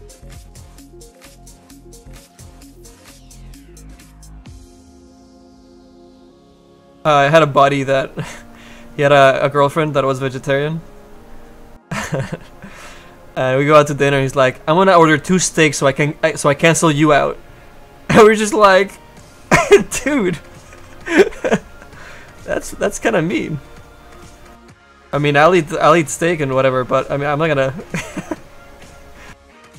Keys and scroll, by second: 2.3 shift+F9, 15.0 s.